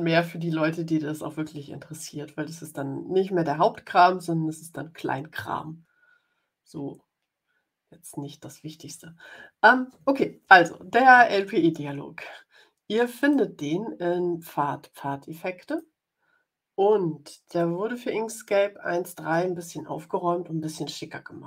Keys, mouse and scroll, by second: 13.1 click, 15.6 click, 17.5-19.4 drag.